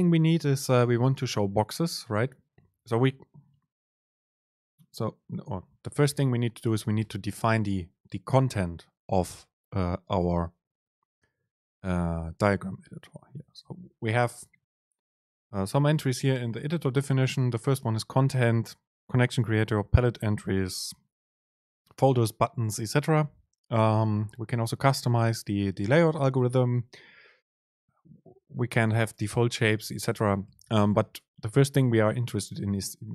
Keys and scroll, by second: 5.4 Up, 6.2 End, 6.5 Left, 7.1 Left, 11.1 BackSpace, 13.5 Up, 13.7 Down, 14.4 Up, 15.4 Down, 16.0 Up, 16.6 Up, 17.9 Down, 23.1 Down, 24.4 Up, 26.6 Down, 28.9 Down, 29.6 Down.